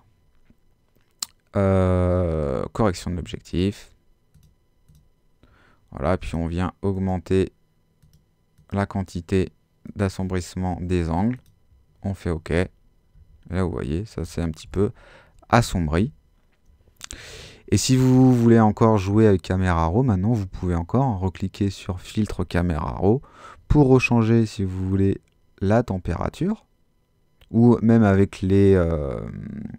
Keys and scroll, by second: 13.1 super+z.